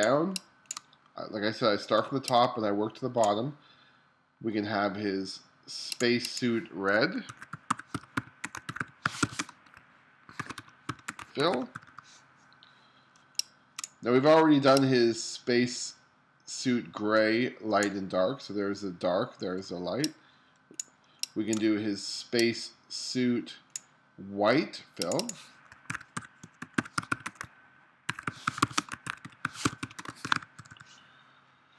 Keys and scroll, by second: 2.1 space, 7.3-9.4 typing, 10.4-11.8 typing, 13.2 space, 19.7 space, 25.9-30.6 typing.